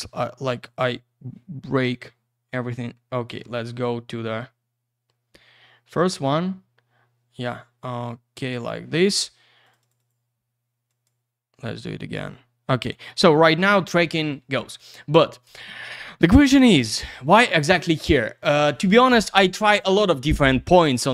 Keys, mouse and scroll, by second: 0.5 click, 0.6 click, 2.5 click, 4.0 ctrl+scroll down 1, 6.2-6.9 scroll up 1, 6.9-7.4 scroll down 1, 7.4 middle click, 9.6 click, 9.7 click, 9.8 click, 9.9 double click, 10.0 click, 10.1 click, 10.9 click, 11.0 click.